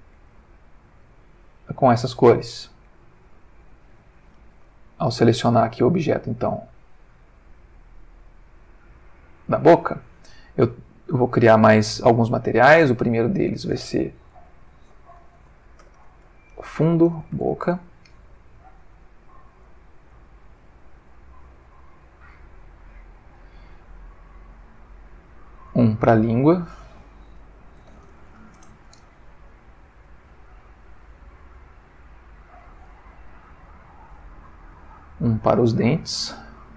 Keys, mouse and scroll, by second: 0.4-1.2 ctrl+shift+middle drag, 1.8 ctrl+middle click, 2.7 ctrl+middle click, 3.4 ctrl+shift+middle click, 4.7 ctrl+middle click, 5.7 ctrl+click, 8.8 click, 11.1 click, 12.8 click, 13.4 click, 14.4-17.5 typing, 17.6 shift+Return, 19.1 click, 19.6 click, 20.1 click, 21.1 click, 22.3 click, 24.2 click, 25.7 click, 26.5 click, 27.5-28.3 typing, 28.5 shift+Return, 30.1 click, 30.7 click, 31.4 click, 32.3 click, 33.6 click, 35.2 click, 36.2 click.